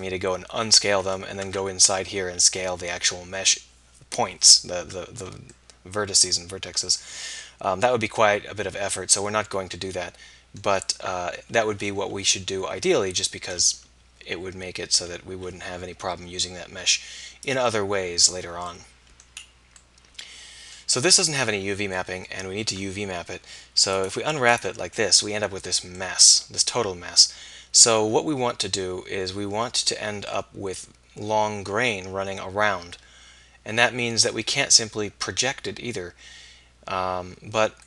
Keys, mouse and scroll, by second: 1.5 Tab, 5.6-6.6 middle drag, 12.6 KP_1, 17.5-23.4 middle drag, 24.0 middle click, 26.1 middle click, 28.0-30.5 middle drag.